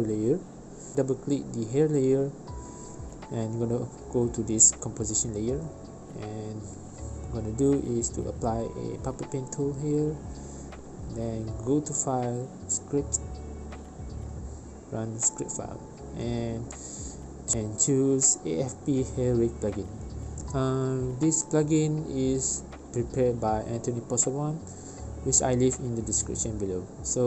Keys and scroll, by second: 12.1 v, 19.2 Return, 23.4 1.